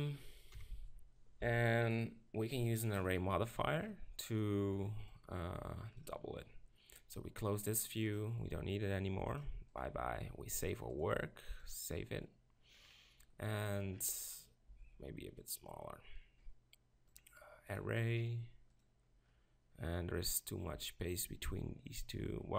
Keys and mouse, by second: 0.5 KP_7, 0.7 z, 1.4 z, 5.1-8.2 drag, 9.7-12.9 drag, 12.9-15.5 middle drag, 14.7 s, 15.5-22.5 drag, 19.3-21.5 middle drag.